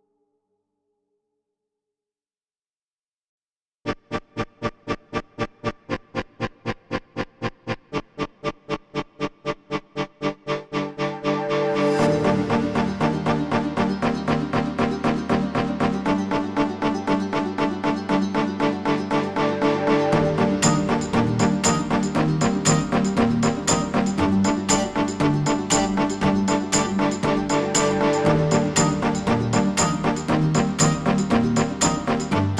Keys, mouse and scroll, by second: 0.9 ctrl+space, 2.8 ctrl+click, 6.5 ctrl+click, 6.9 alt+scroll down 1, 7.3 alt+scroll up 1, 9.4 alt+scroll up 1, 11.8 click, 16.3 alt+scroll down 1, 16.5 alt+scroll up 1, 16.9 space, 17.1 click, 17.9 ctrl+c, 18.3 ctrl+f, 18.7 ctrl+alt+scroll up 1, 19.8-23.7 alt+shift+drag, 26.0-26.6 alt+scroll down 2, 28.7 ctrl+alt+scroll down 1, 28.7 alt+scroll up 1, 29.3-29.8 alt+scroll down 1, 29.8 alt+scroll up 1, 30.2 alt+scroll down 1, 30.8 alt+scroll up 1.